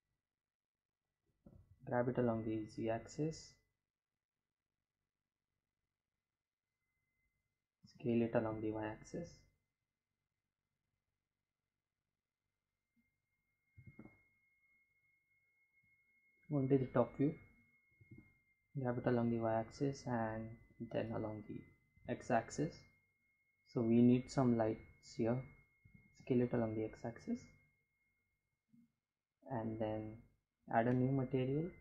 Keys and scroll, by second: 6.0 s, 6.7 y, 12.0 g, 12.2 y, 14.6 Home, 16.3 y, 18.8 g, 20.1 x, 24.1 s, 24.3 x.